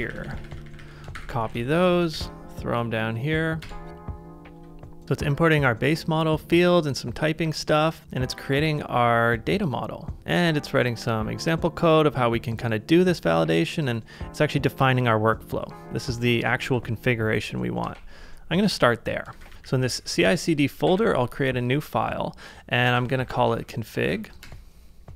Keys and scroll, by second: 0.1 shift+], 1.0 shift+], 1.5 super+Tab, 2.1 super+v, 3.6 Return, 16.6 super+c, 17.9 super+Tab, 19.2-21.4 typing, 22.7-24.9 typing.